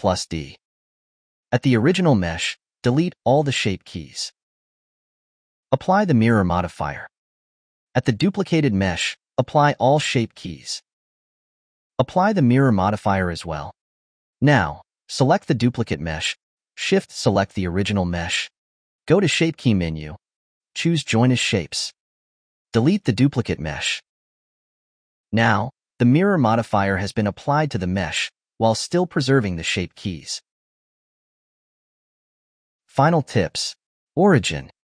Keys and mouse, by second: 1.1 click, 2.6 click, 3.7-5.7 drag, 6.3-7.7 drag, 7.9 click, 9.0-11.0 drag, 12.1-14.3 drag, 16.6 click, 18.3 shift+click, 19.5 click, 20.3-22.4 drag, 23.2 click, 23.7 x, 24.5-25.0 ctrl+shift+middle drag, 25.1 middle drag, 25.4 click, 26.3 click, 28.1 click, 28.9 click, 29.4 click, 32.3-34.1 middle drag.